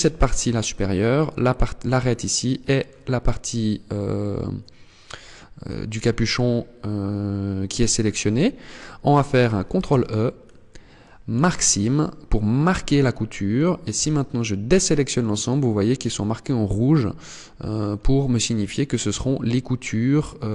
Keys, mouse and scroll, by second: 1.4 middle click, 4.6 scroll down 4, 5.1-6.4 scroll up 1, 6.4 scroll up 2, 9.2 ctrl+e, 12.1-13.0 scroll up 3, 13.2 scroll down 2, 13.4 a, 14.2 middle click, 16.4 middle click, 17.4-17.8 scroll down 3, 17.9 middle click.